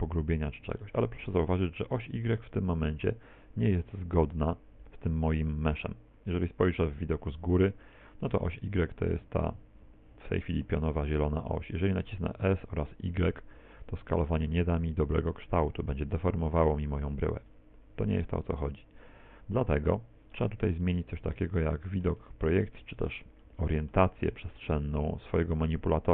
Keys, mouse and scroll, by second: 3.9 KP_1, 6.4 KP_7, 7.9 shift+middle click, 12.4 s, 16.2 click, 17.3 ctrl+z, 19.9 middle click, 20.8 middle click, 22.6 shift+middle click, 23.4 middle click, 24.4 middle click.